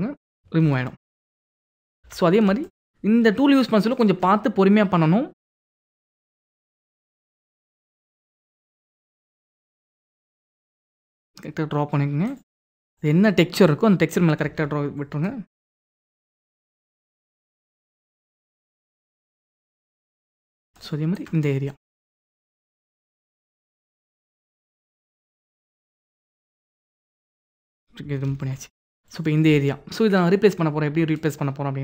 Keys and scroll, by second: 0.2 ctrl+d, 1.7 ctrl+=, 2.3 ctrl+=, 9.9 ctrl+d, 14.1 ctrl+d, 19.9 ctrl+d, 27.9 ctrl+d, 28.8 ctrl+d.